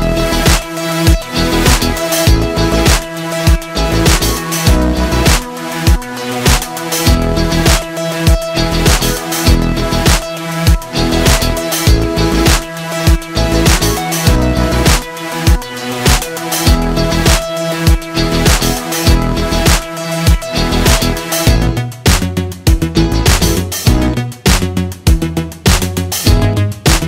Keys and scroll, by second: 0.5 m, 4.1 i, 4.9 v, 5.2 ctrl+shift+[, 6.0 ctrl+], 6.2 ctrl+[, 8.2 m, 9.1 Tab, 9.2 1, 9.4 0, 9.8 Return, 10.8 i, 11.6 ctrl+shift+[, 12.3 v, 15.2 z, 15.4 space, 15.7 p, 20.2 z, 20.4 space, 20.7 i, 23.7 z, 25.0 c.